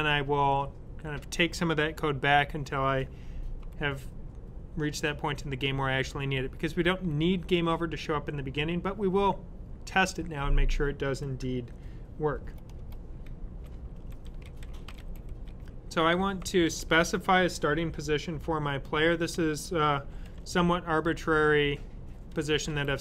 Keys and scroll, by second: 13.8-16.8 typing, 18.8-20.9 typing, 22.3-23.0 typing.